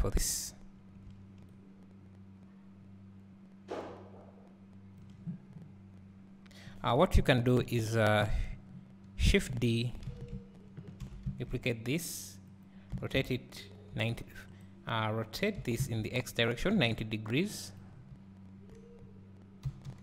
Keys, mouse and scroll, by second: 7.2 KP_7, 7.6 KP_1, 8.7 scroll up 1, 9.3 Tab, 9.3 click, 10.1 a, 11.0 shift+d, 14.5 e, 14.7 Right, 14.7 click, 17.9 scroll, 18.8 scroll, 19.7 r.